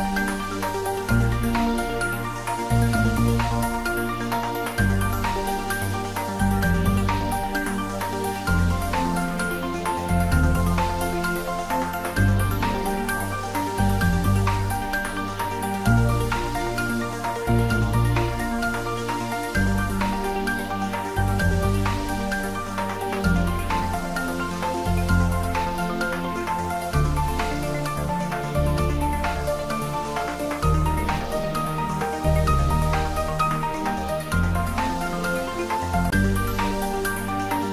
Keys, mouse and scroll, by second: 0.5 click, 4.9 click, 7.4 click, 14.3 click, 16.6 ctrl+s, 21.3 ctrl+s, 31.1 click, 34.3 click.